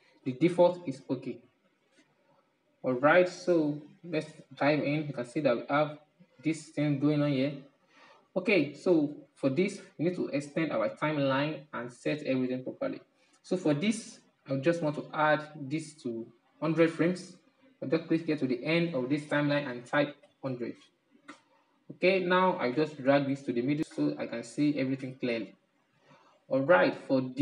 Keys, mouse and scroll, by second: 1.1 ctrl+z, 1.7 ctrl+z, 3.3-3.9 middle drag, 3.9 scroll up 7, 4.4-5.1 middle drag, 5.1-5.9 scroll up 4, 6.5-7.4 scroll down 8, 7.6-9.3 middle drag, 9.3-12.2 drag, 12.4-20.7 drag, 20.7 0, 22.8-24.4 middle drag, 24.4-25.1 scroll up 6, 25.2-26.2 middle drag, 26.2-27.3 drag, 27.3-27.4 middle drag.